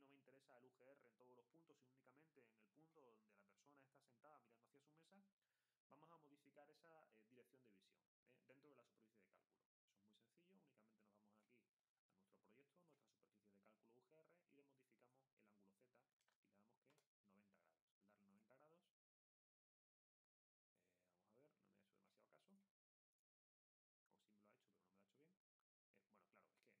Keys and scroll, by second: 15.9-17.8 typing.